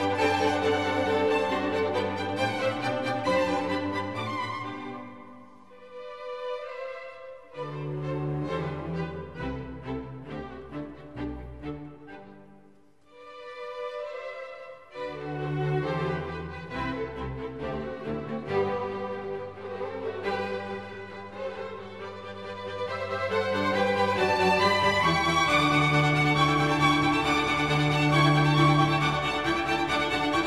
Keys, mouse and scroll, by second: 6.5 ctrl+alt+shift+e, 22.7 right click.